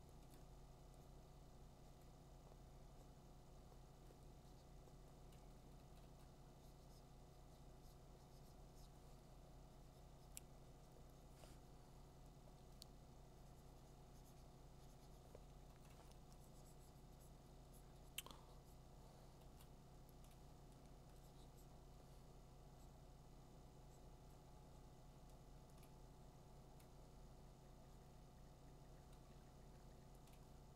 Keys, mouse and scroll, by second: 0.3 click, 5.3 ], 5.6 ], 6.0 ], 15.7 ], 15.9 ], 19.4 [, 20.2 [, 20.3 click, 20.5 [, 21.0 [, 25.9 click, 30.4 click.